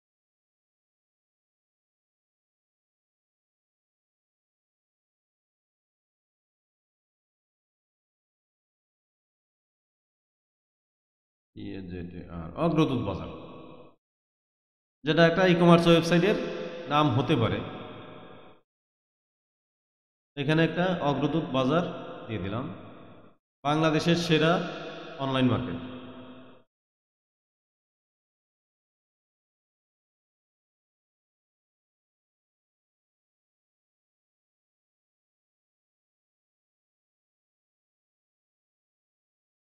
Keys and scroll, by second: 0.0 u, 1.3 t, 2.8 space, 7.9 a, 8.6 z, 8.9 a, 9.7 BackSpace, 11.3-12.3 typing, 26.8-29.6 typing, 30.6-38.3 typing, 39.3 BackSpace.